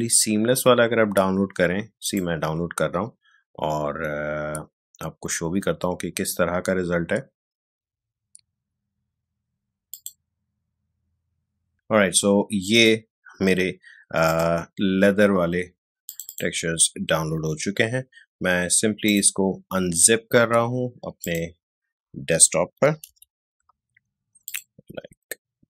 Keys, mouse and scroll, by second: 2.0 click, 9.8 click.